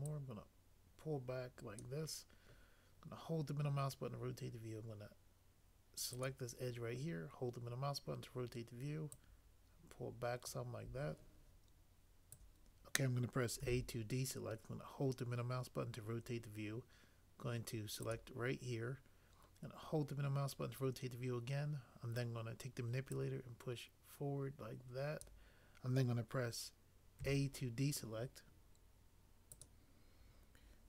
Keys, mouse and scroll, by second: 13.6 a, 27.1 a.